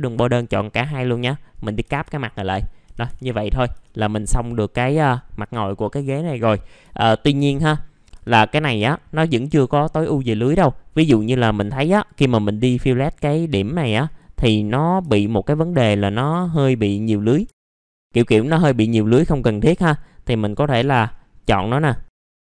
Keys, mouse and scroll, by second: 0.5 right click, 1.5 click, 2.8 F4, 3.3 middle click, 3.4 scroll down 1, 4.2-6.8 scroll down 1, 7.0 alt+middle click, 7.7-8.2 scroll up 1, 10.4 scroll up 1, 10.9 click, 11.7 ctrl+click, 13.3 middle click, 14.0 click, 15.6 ctrl+click, 17.4 F3, 17.7 click, 17.9 alt+middle click, 18.1-19.1 scroll up 2, 18.3 F3, 19.1 click, 20.2 scroll down 1, 21.1 scroll up 1, 22.1 ctrl+click.